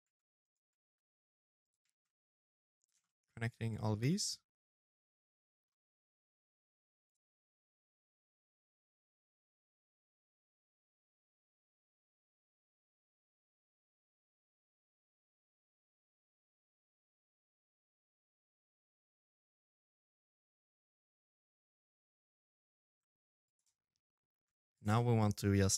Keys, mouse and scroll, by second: 0.6 shift+d, 1.8 shift+middle click, 2.1 scroll down 1, 2.6 shift+middle click, 3.0 middle click, 5.8 click, 6.3 shift+d, 8.0-9.6 typing, 10.8 g, 12.1 shift+d, 12.9 middle click, 14.4 click, 15.5 click, 15.5 shift+d, 16.0 g, 17.6 shift+d, 18.4 middle click, 18.7 ctrl+z, 19.1 ctrl+z, 19.2 middle click, 19.9 click, 20.2 shift+d, 20.7 shift+d, 21.4 shift+d, 23.0 shift+d, 23.2 shift+d, 23.7 middle click, 24.9 middle click.